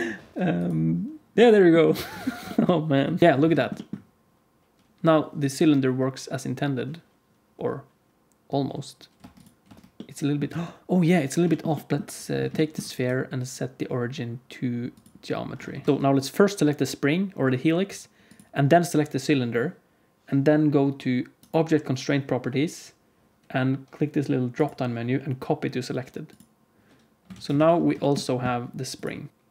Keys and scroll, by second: 1.9 alt+a, 2.1 ctrl+s, 3.2 space, 9.1 space, 9.6 space, 10.4 space, 27.2 alt+a, 27.5 ctrl+s, 29.3 alt+shift+z, 29.3 space.